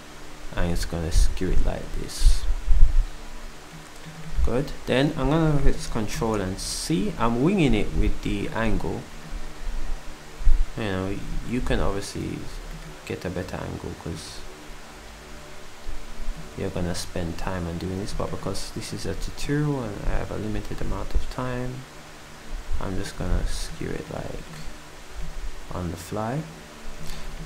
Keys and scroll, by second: 12.5 s, 23.3 s.